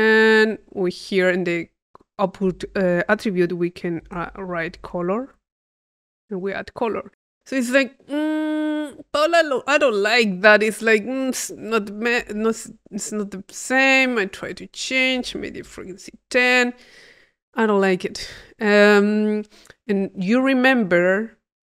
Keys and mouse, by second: 1.0 click, 12.0 click, 13.2-14.7 drag, 14.8 click, 15.9 click, 16.4 click, 18.5-20.1 drag, 20.2 click, 20.9 click.